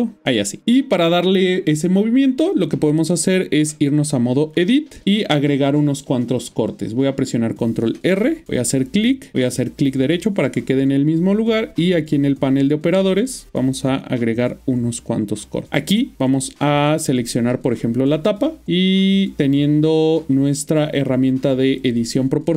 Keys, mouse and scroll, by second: 0.2 middle click, 3.3-3.7 Tab, 4.8 ctrl+middle click, 8.6 click, 9.7 right click, 13.1 click, 15.9 middle click, 17.1 alt+click, 21.8 click.